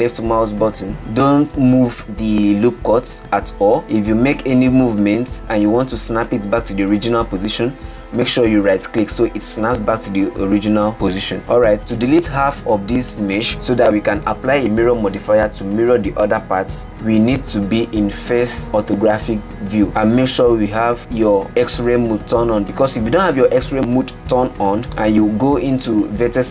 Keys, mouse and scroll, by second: 10.6 scroll down 3, 10.8 scroll up 1, 11.4 scroll down 1, 12.6 KP_1, 13.5-14.5 shift+middle drag, 25.1 1.